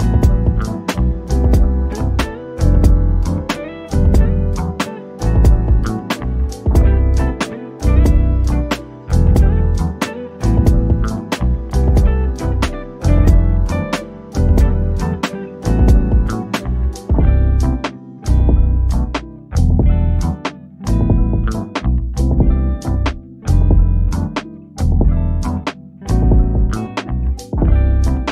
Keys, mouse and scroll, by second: 1.2-3.6 shift+drag, 3.6-4.6 typing, 7.7 scroll down 1, 9.1 o, 9.4-12.3 drag, 12.3 scroll down 1, 12.6-14.9 drag, 14.9-15.4 scroll up 1, 15.4 Escape, 16.9 shift+click, 18.8 click, 21.6 click, 22.6 o, 23.2 click, 24.2 scroll down 1, 24.8-28.3 drag.